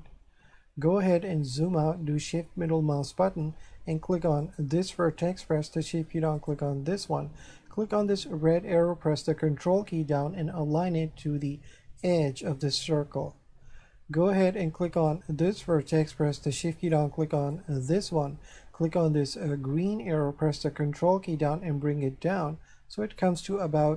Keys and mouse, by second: 2.4 shift+middle click, 4.4 right click, 6.4 shift+right click, 8.0 click, 9.3 ctrl+click, 15.0 right click, 17.4 shift+right click, 19.4 click, 20.6 ctrl+click.